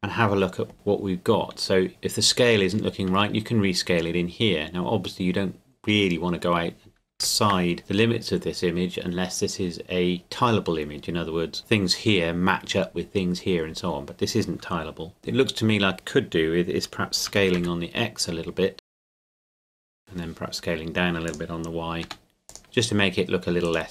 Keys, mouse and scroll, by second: 1.9 scroll up 1, 3.1 s, 7.1 Escape, 17.3 s, 17.6 x, 18.8 click, 18.9 g, 19.2 click, 19.3 o, 19.8 s, 20.0 y, 21.3 click, 22.0 g, 22.5 click, 22.6 Tab, 23.6 right click.